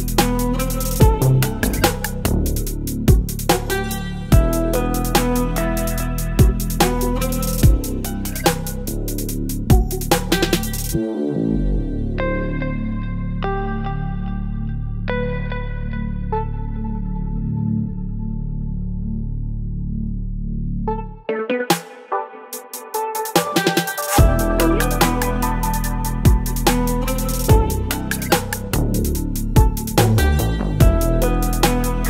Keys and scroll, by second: 0.5 space, 1.7 Delete, 2.1 space, 4.9 ctrl+BackSpace, 6.7 ctrl+BackSpace, 9.5 ctrl+BackSpace, 10.9 v, 12.3 ctrl+t, 15.0 Return, 16.6 Return, 17.1 l, 18.0 ctrl+BackSpace, 19.8 space, 19.9 v, 20.4 l, 23.7 Delete, 26.3 ctrl+BackSpace, 28.2 Delete, 29.2 Delete, 30.0 Delete.